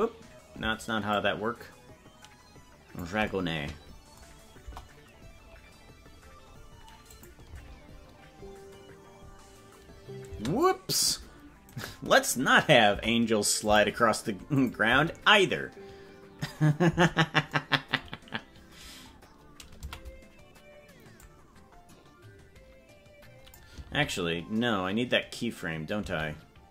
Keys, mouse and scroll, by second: 0.1 ctrl+z, 1.1-3.0 shift+drag, 4.6 KP_0, 5.4 scroll up 1, 7.1 click, 7.5 space, 11.6-12.9 right drag, 12.9 Delete, 14.6 click, 14.8 space, 18.4 scroll down 1, 19.8 a, 21.3-23.6 drag, 24.9 ctrl+z.